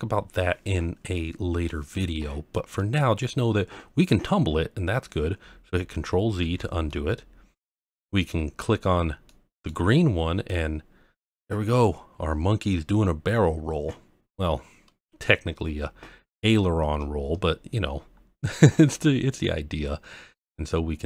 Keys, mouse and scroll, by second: 1.1-1.7 middle drag, 2.5-2.9 middle drag, 6.4 ctrl+z, 6.9-7.7 middle drag, 9.2-9.6 middle drag, 10.5 click.